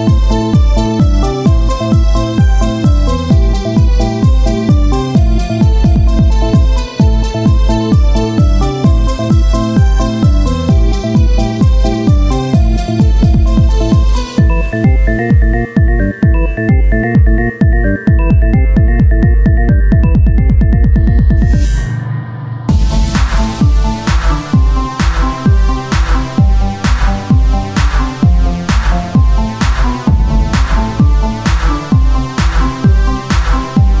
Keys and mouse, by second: 1.1 KP_1, 4.7-7.7 drag, 7.7 z, 8.8 Tab, 9.1 click, 9.3 c, 10.4 click, 11.7-15.5 right drag, 12.6 c, 15.5 c, 16.7 click, 17.2 click, 17.2 c, 18.3-19.4 drag, 19.5 ctrl+z, 20.3 s, 22.6 z, 24.6 z, 24.7 x, 25.5 c, 26.8 c, 28.3 r, 29.7-31.1 right drag, 30.3 c, 32.0 c, 33.3 right click, 33.4 Tab, 33.8 z.